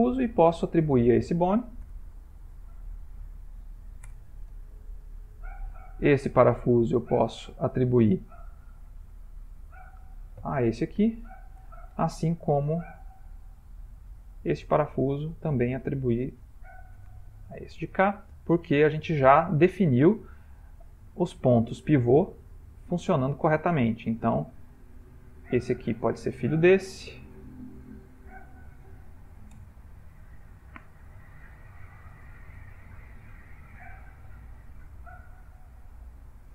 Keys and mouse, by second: 0.5 shift+click, 1.9 ctrl+p, 4.3 Return, 5.1 shift+middle click, 5.3 shift+middle click, 6.5 click, 7.6 middle click, 9.5 shift+click, 11.1 ctrl+p, 13.9 click, 14.4 click, 15.7 shift+click, 15.8 shift+click, 17.0 ctrl+p, 20.1 shift+middle click, 21.6 click, 22.6 middle click, 22.8 middle click, 24.7 click, 25.6 shift+click, 26.8 ctrl+p, 30.1 middle click, 32.6 ctrl+middle click, 33.4 shift+middle click, 34.4 middle click, 36.1 click, 36.3 click.